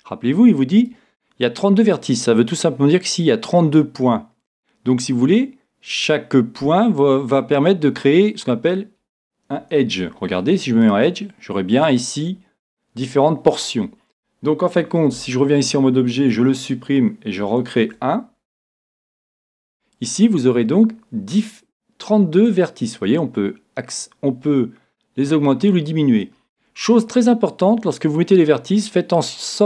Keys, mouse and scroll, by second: 0.8-2.7 right drag, 9.8 ctrl+Tab, 11.7-15.5 right drag, 15.2 Tab, 16.4 x, 17.8 shift+a, 22.5-24.3 drag.